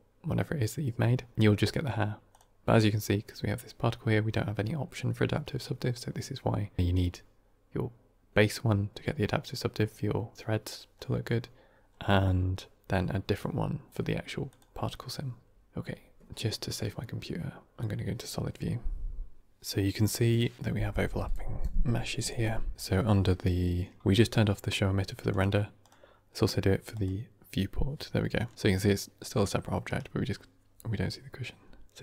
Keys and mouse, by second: 2.2 click, 14.4 click, 25.2 click, 25.7 click, 26.9 click, 28.5 g.